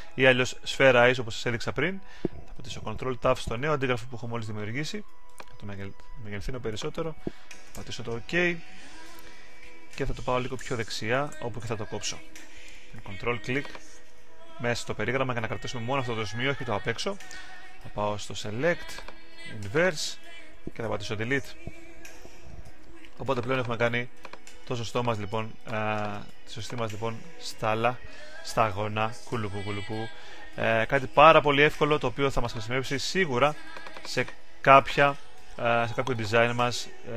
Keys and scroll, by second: 2.8 super+t, 10.4 Right.